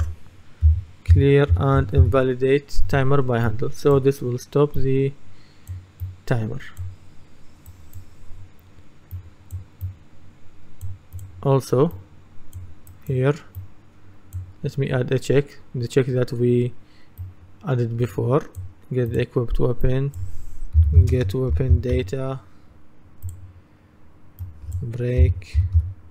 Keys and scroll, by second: 0.7-2.5 typing, 20.6-22.5 typing, 25.0-26.1 typing.